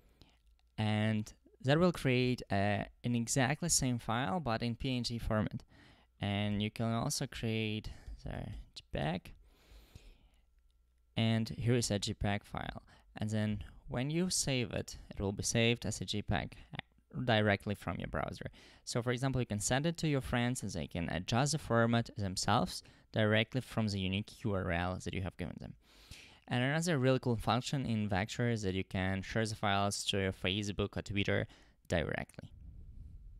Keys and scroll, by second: 6.7-9.1 typing.